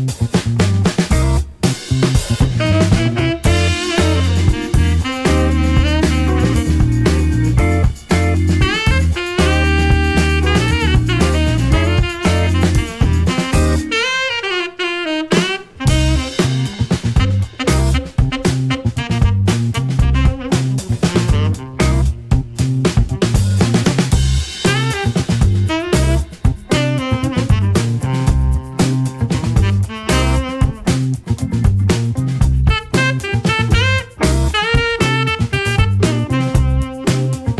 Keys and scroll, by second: 3.4 4, 3.8 Return, 13.0 super+c, 13.2 super+v, 21.1 BackSpace, 21.4 BackSpace, 21.7 BackSpace.